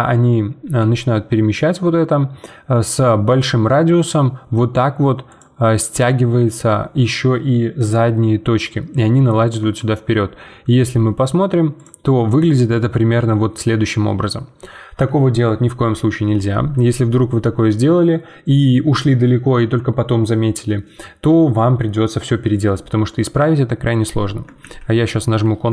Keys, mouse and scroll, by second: 0.6 g, 9.6 Tab, 10.1-11.7 middle drag, 11.7 click, 12.2-15.3 middle drag, 24.6 ctrl+z, 25.2 ctrl+z.